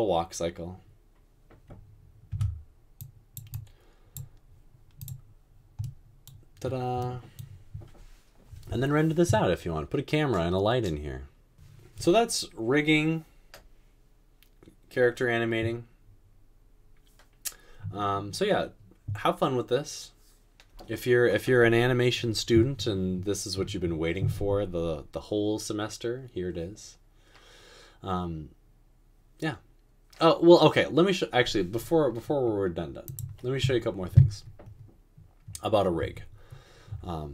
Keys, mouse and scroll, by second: 2.4 Tab, 36.1 space, 36.9 space.